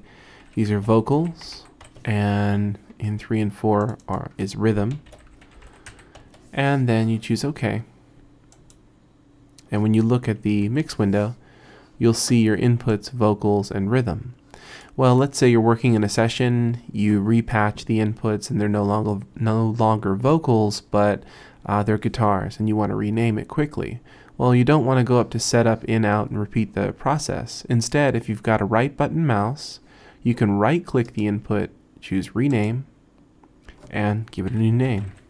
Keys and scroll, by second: 0.6-2.1 typing, 4.9-6.4 typing, 10.7 super+=, 34.7-35.2 typing.